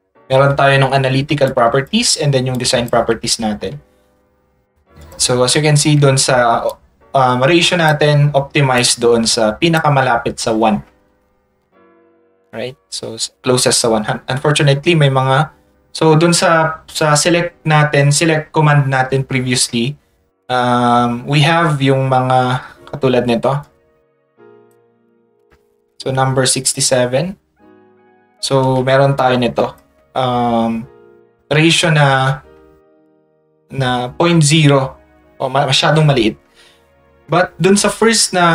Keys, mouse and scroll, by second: 1.5 ctrl+click, 2.5 ctrl+click, 5.0 click, 23.6 ctrl+click, 29.2 ctrl+click.